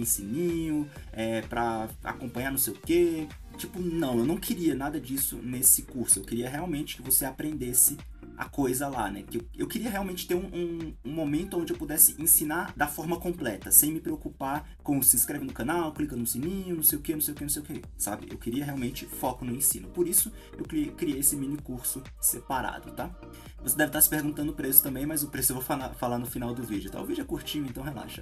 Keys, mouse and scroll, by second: 0.6-1.7 drag, 1.7 KP_0, 2.1 z, 2.2-3.0 scroll up 2, 2.6 middle click, 3.8 middle click, 4.5-8.1 drag, 8.7-9.6 drag, 9.6-10.7 middle drag, 9.6-10.2 scroll down 2, 10.2 KP_0, 10.7 scroll up 1, 11.9-13.1 middle drag, 13.1 KP_Enter, 13.1 click, 13.6 click, 14.6 click, 14.8-15.8 middle drag, 15.2 KP_3, 15.5-15.9 scroll up 4, 16.7 KP_0, 18.0-19.3 drag, 21.7 click, 22.9 click.